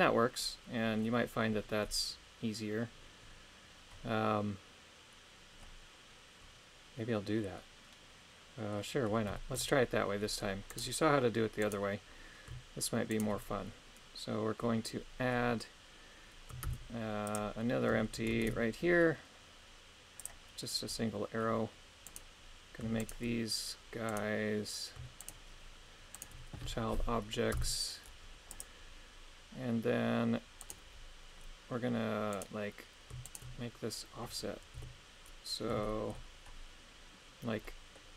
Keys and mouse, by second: 7.5-8.7 middle drag, 9.3 shift+middle click, 10.7 right click, 11.6 right click, 13.1 shift+right click, 16.6 shift+s, 18.4 shift+a, 22.1 right click, 23.0 shift+right click, 25.2 shift+right click, 26.1 shift+right click, 27.5 ctrl+p, 30.6 right click, 32.3 right click, 33.2 shift+right click, 34.7 KP_3, 35.8 shift+middle click, 37.6 middle click.